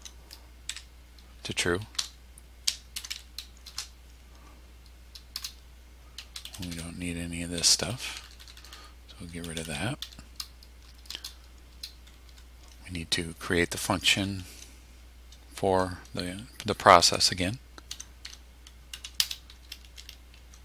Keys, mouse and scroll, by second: 0.7 Tab, 2.0-3.7 typing, 5.3 Return, 6.2 Delete, 11.1 Return, 12.3 BackSpace, 17.9-19.5 typing.